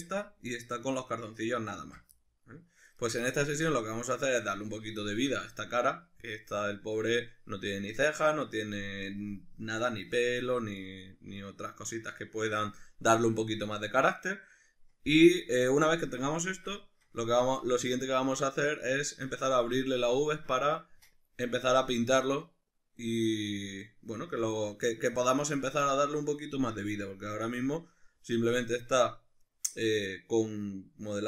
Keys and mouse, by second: 0.2-31.2 middle drag, 1.8 ctrl+z.